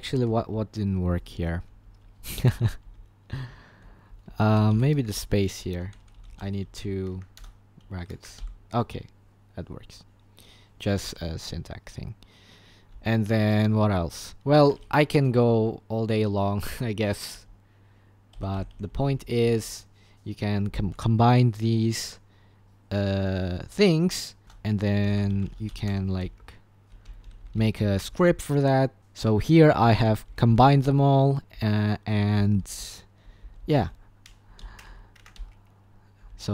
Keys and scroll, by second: 0.0-8.4 typing, 7.2 Escape, 7.4 Return, 10.7-11.4 typing, 12.9 typing, 14.1 Escape, 14.7 Escape, 15.5 shift+Page_Up, 17.3 shift+Page_Up, 18.3 shift+Page_Down, 18.5 shift+Page_Down, 18.7 shift+Page_Down, 18.9 shift+Page_Down, 19.6 shift+Page_Down, 24.4 Return, 24.4-36.5 typing.